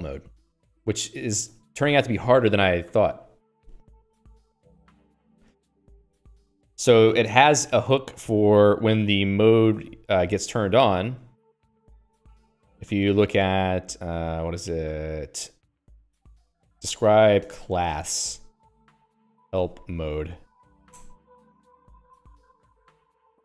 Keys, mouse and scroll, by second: 0.9 q, 1.9 Escape, 2.5 click, 5.6 Escape, 5.7 Escape, 10.8 Escape.